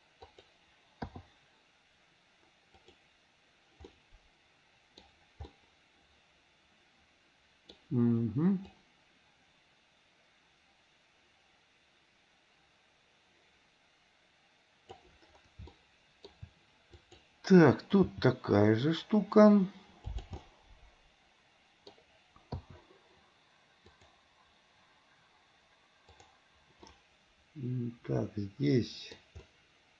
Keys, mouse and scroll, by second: 1.3 i, 3.0 click, 4.2-5.2 middle drag, 5.7-7.9 middle drag, 9.0-15.3 drag, 15.9-16.6 shift+middle drag, 17.2-17.7 drag, 18.4 g, 20.5-22.2 middle drag, 20.5 scroll up 1, 22.2 scroll down 1, 24.1 click, 26.2 click, 27.1-29.3 middle drag, 29.7-29.9 middle drag.